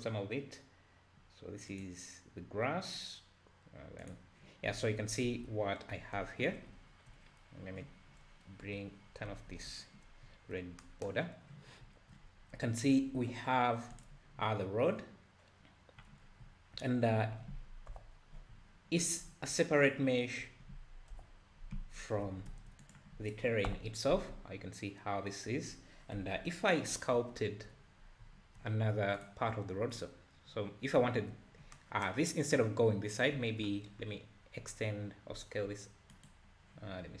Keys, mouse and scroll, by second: 3.1 click, 4.1 click, 4.7 `, 5.3 alt+a, 5.5 `, 6.6 scroll up 1, 6.7 `, 9.3 ctrl+alt+b, 10.1 scroll down 2, 11.7 scroll down 4, 12.2-12.6 scroll up 4, 13.1-13.9 scroll up 2, 13.9 click, 16.2 scroll down 2, 17.9 KP_Divide, 18.5 `, 19.2 scroll up 5, 19.5 `, 21.2 KP_Divide, 22.3 alt+a, 22.5 `, 22.8 click, 23.7 KP_Divide, 24.3 `, 26.3 KP_7, 27.1 `, 28.0 scroll up 1, 28.2 `, 29.2-31.0 drag, 31.0 `, 33.3 `, 33.8-34.9 scroll down 6, 35.4 s.